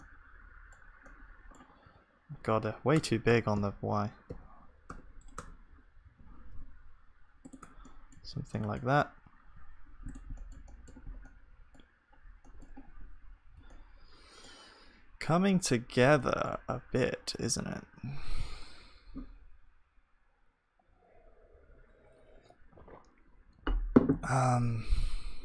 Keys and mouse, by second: 0.0-3.3 middle drag, 1.9 a, 2.3 Tab, 2.9 Tab, 3.3 Tab, 3.5 s, 5.3 Tab, 6.0 s, 7.6 Tab, 8.2 ctrl+s, 8.2-16.1 middle drag, 8.8 z, 11.1-12.9 drag, 11.1-12.9 right drag, 12.9 KP_1, 16.2-25.4 middle drag.